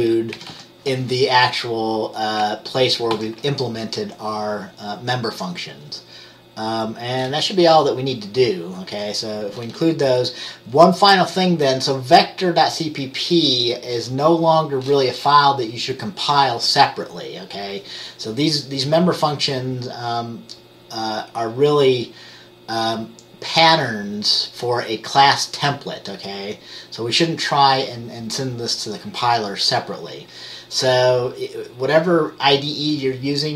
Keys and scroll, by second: 0.5 typing.